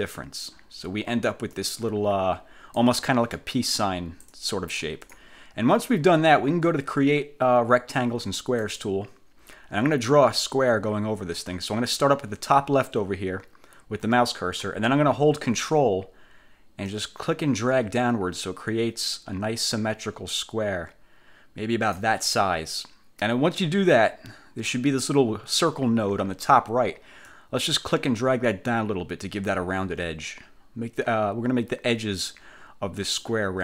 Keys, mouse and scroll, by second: 1.7-3.1 drag, 3.9-5.5 drag, 8.7 click, 17.0-22.2 ctrl+drag, 27.3-33.5 drag.